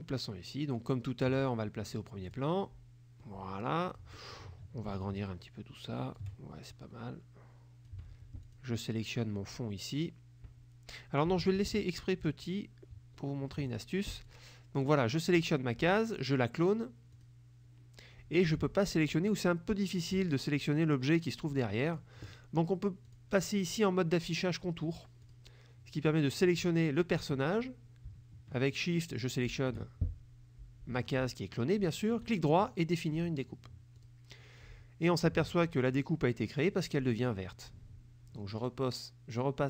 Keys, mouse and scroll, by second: 2.3 click, 3.3 click, 5.1-6.4 ctrl+shift+drag, 6.8-8.1 shift+drag, 8.5 click, 11.8 ctrl+z, 13.8 ctrl+click, 14.3 click, 17.3 click, 19.3 click, 21.0 click, 22.0 click, 23.2 click, 24.9 click, 25.4 click, 26.4 click, 29.2 shift+click, 32.3 right click, 34.0 click, 38.7 click.